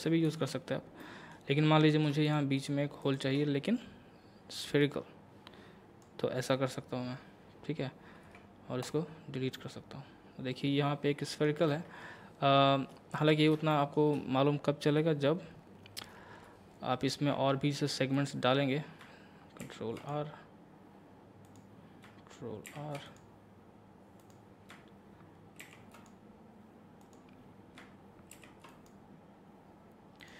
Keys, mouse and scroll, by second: 0.3 ctrl+z, 0.7-1.0 scroll up 1, 1.0 middle click, 1.8 click, 2.3 shift+click, 4.8-8.3 drag, 8.2 x, 8.8 click, 9.6-11.7 middle drag, 11.7 Tab, 13.3 scroll up 1, 13.7 shift+middle click, 16.0 Tab, 18.1 click, 19.6 ctrl+r, 20.0 ctrl+click, 21.5 click, 22.7 ctrl+r, 23.1 click, 25.6 ctrl+r, 25.9 click, 28.3 ctrl+r, 28.7 click.